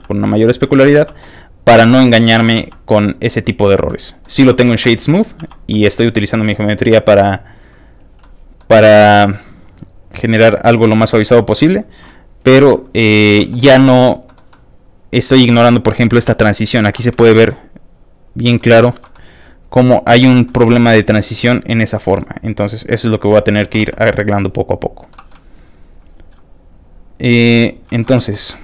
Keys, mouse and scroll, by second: 0.0 shift+f, 0.0 click, 0.3 middle click, 0.7 f, 0.7 click, 1.2 click, 1.5 click, 2.4 ctrl+z, 2.6 f, 2.6 ctrl+click, 2.8 ctrl+click, 3.4 ctrl+click, 3.9 ctrl+middle click, 4.5 ctrl+z, 4.6 ctrl+shift+middle click, 4.8 middle click, 5.4 shift+f, 5.5 ctrl+click, 5.7 middle click, 6.1 f, 6.2 click, 6.4 click, 7.2 click, 8.0 click, 8.2 middle click, 8.9 shift+middle click, 9.2 middle click, 9.5 shift+f, 9.7 click, 9.9 click, 10.4 click, 10.9 click, 11.1 click, 11.6 click, 12.0 middle click, 12.7 shift+middle click, 13.4 shift+f, 13.5 click, 13.7 middle click, 14.2 middle click, 14.5 middle click, 15.6 middle click, 16.3 d, 16.3 click, 17.5 middle click, 18.6 middle click, 18.8 shift+middle click, 19.1-20.3 middle drag, 20.4 middle click, 20.6-22.2 middle drag, 22.4 shift+click, 23.3 middle click, 23.7 ctrl+z, 23.8 f, 23.9 ctrl+click, 24.1 ctrl+click, 25.1 ctrl+middle click, 25.5 shift+click, 26.1 click, 26.5 shift+click, 26.7 shift+click, 27.1 shift+click, 27.3 shift+click, 27.5 shift+click, 27.9 shift+middle click, 28.2 shift+f, 28.3 click, 28.5 middle click.